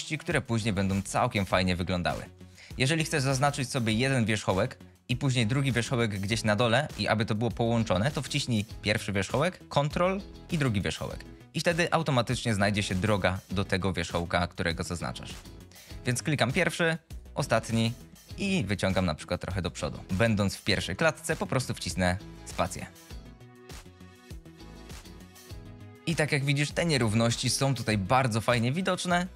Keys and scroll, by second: 18.6 g, 21.6 space.